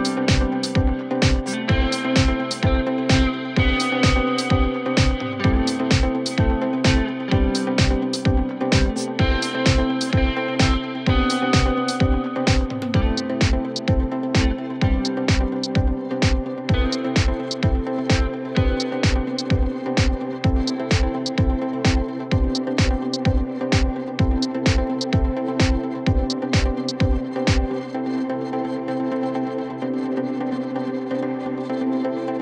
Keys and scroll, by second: 0.7-7.0 typing, 3.7 Up, 8.5-11.6 typing, 14.1 -, 15.5-17.5 typing, 19.3-22.8 typing, 24.7-25.4 typing, 26.4 Return, 30.9 ctrl+z.